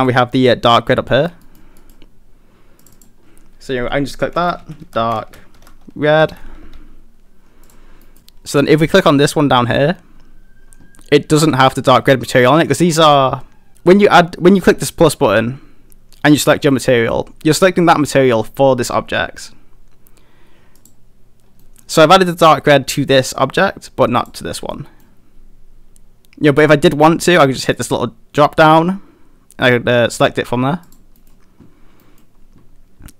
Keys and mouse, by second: 1.1 shift+middle drag, 1.5 middle click, 1.8 middle drag, 2.8 click, 3.0-6.7 drag, 8.1 middle click, 8.9 click, 20.8 click, 21.6 middle click, 24.2 click, 24.7-25.0 middle drag, 27.8-30.9 drag, 31.2 middle click, 32.1 middle click.